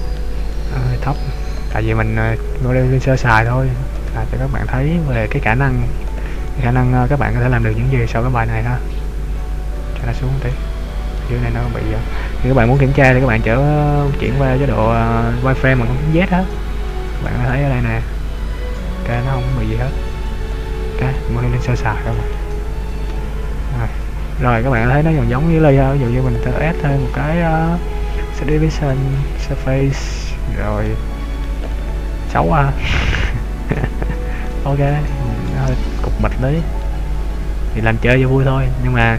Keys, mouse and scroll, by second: 0.6 middle click, 1.7 right click, 2.2-3.0 scroll up 1, 3.0 Tab, 3.4 right click, 4.1 right click, 5.4 click, 6.2 right click, 6.6 middle click, 8.5 click, 10.6 middle click, 10.6 scroll up 1, 11.4 scroll down 2, 14.4 click, 15.6 click, 15.7 z, 16.6 click, 17.6 middle click, 19.3 middle click, 20.0 click, 21.2 middle click, 22.1 middle click, 23.2 Tab, 23.7 z, 24.2 scroll up 2, 25.2 a, 26.2 click, 30.5-30.9 scroll down 1, 30.9 middle click, 31.8 middle click, 33.7 click, 34.8 middle click, 35.9 middle click, 37.9 click, 38.6-39.0 scroll down 3.